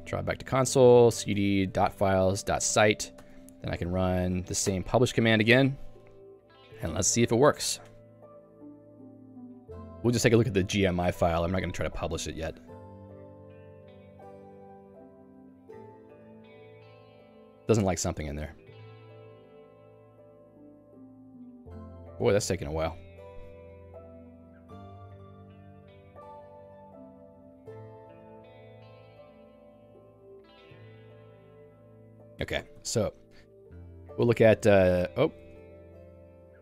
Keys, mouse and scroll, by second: 0.8-3.1 typing, 2.0 Tab, 3.3 Return, 3.7 Up, 3.8 Up, 4.3 Down, 4.8 Return, 32.8 ctrl+f, 33.7 Escape.